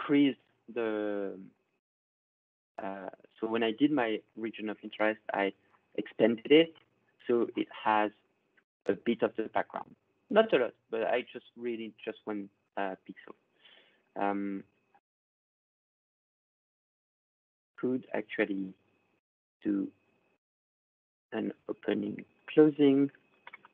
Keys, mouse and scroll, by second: 0.0-0.3 ctrl+scroll, 1.4-2.2 ctrl+scroll, 5.3 click, 7.3 click, 7.6-8.2 ctrl+scroll, 13.8-16.8 ctrl+scroll, 18.0 click, 19.5 scroll down 12, 20.9 click, 21.5 click, 22.3 click, 23.0 1, 23.1 Return.